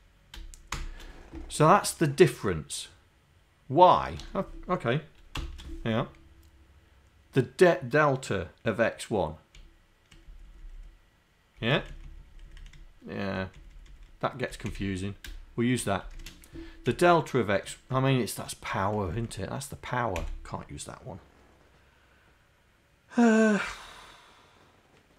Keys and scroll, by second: 0.7 shift+7, 4.2 BackSpace, 5.4 shift+y, 9.6 Right, 10.3 Left, 10.5 Left, 11.6 Right, 11.9 Right, 12.4 Right, 12.8 Down, 13.6 Down, 13.8 Down, 14.6 Down, 14.7 Delete, 17.0 Right, 18.0 Down, 19.1 Up, 20.3 Delete.